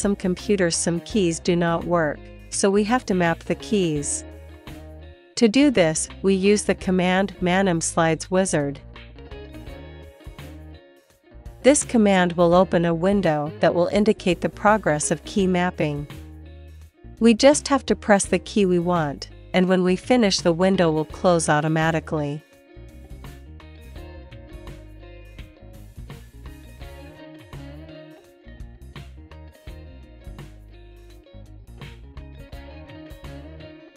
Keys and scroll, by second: 0.0 Left, 0.3 Up, 1.0 Down, 1.5 Right, 1.8 Left, 2.3 Up, 3.3 space, 7.0-9.3 typing, 18.1 space, 20.3 q, 23.1 Right, 24.5 Left, 26.4 Up, 28.0 Down, 30.7 space.